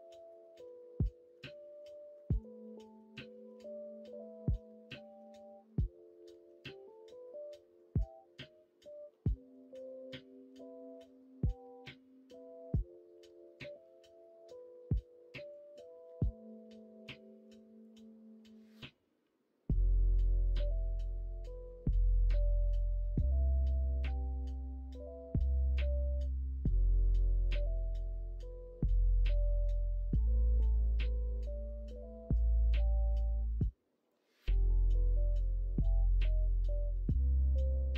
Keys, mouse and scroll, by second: 0.5 alt+z, 0.8 middle click, 1.3 alt+z, 1.6 middle click, 2.2 middle click, 2.6 middle click, 3.0 middle click, 3.8-5.1 middle drag, 6.4 l, 9.2 click, 9.8 middle click, 10.9 middle click, 18.6-21.6 middle drag, 22.2 ctrl+r, 24.4-27.6 middle drag, 28.2 middle click.